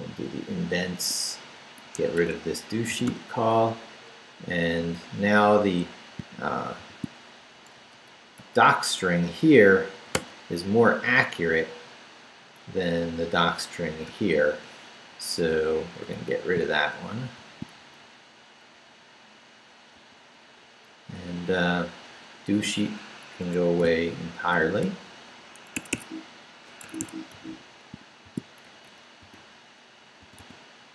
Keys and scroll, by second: 0.4 Down, 0.9 Tab, 1.4 Down, 2.1 Escape, 2.8 d, 4.4 Down, 6.1 shift+Down, 6.9 shift+v, 7.1 shift+Down, 8.0 Down, 10.1 d, 10.8 Up, 11.4 Up, 13.0 Down, 14.0 p, 15.1 Down, 15.6 Down, 16.2 Down, 17.8 shift+Down, 19.9 d, 20.6 Down, 21.2 Down, 21.8 Down, 23.4 Escape, 24.6 shift+d, 25.8 Escape, 27.3 u, 27.9 shift+u, 28.2 shift+v, 28.4 shift+Down, 29.2 d.